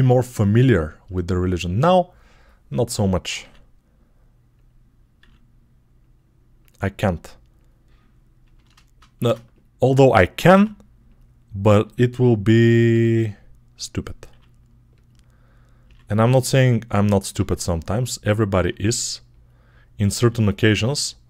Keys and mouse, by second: 1.6 Tab, 2.3-6.2 middle drag, 3.2 e, 5.0 e, 6.4 click, 7.5 click, 9.0 shift+3, 9.4 click, 10.4 x, 12.6-20.0 middle drag, 12.8 e, 14.1 r, 15.7 s, 17.2 g, 18.4 e, 20.0 r.